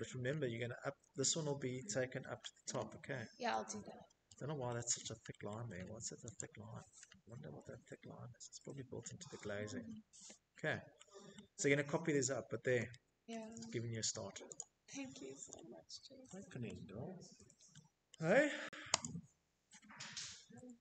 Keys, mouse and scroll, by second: 1.4 middle click, 1.6 middle click, 2.0 middle click, 2.6 middle click, 2.8 middle click, 3.0 middle click, 3.4 click, 3.8 middle click, 3.9 middle click, 4.1 middle click, 4.2 middle click, 4.3 middle click, 4.4 Escape, 4.4 middle click, 4.5 middle click, 4.7 Escape, 4.7 middle click, 4.9-5.5 scroll, 6.0-6.4 scroll, 6.7 Escape, 6.9-7.4 scroll, 7.4 middle click, 8.4 middle click, 8.9 middle click, 9.0 middle click, 9.1 middle click, 10.4 middle click, 11.6 click, 13.4 middle click, 15.2 shift+middle click, 16.1 click.